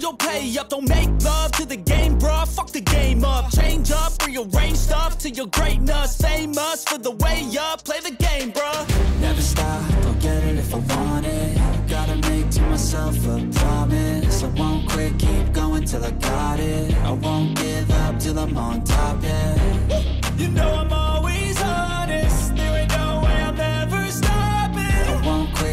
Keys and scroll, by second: 0.0 ctrl+-, 0.3 ctrl+z, 0.6 ctrl+z, 1.2 ], 4.7 space, 10.0 ctrl+z, 11.0 ctrl+z, 11.5 ctrl+z, 11.9 ctrl+z, 12.2 ctrl+z, 12.6 ctrl+z, 13.0 ctrl+=, 20.6 ctrl+=, 21.0 ctrl+z, 21.1 ctrl+=, 21.4 space, 22.4 ctrl+-.